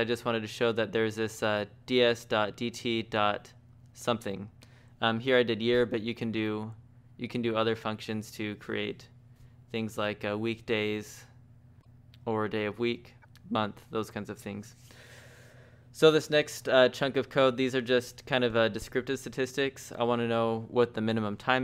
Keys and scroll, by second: 4.6-8.4 typing, 11.3 shift+v, 18.0-19.1 typing.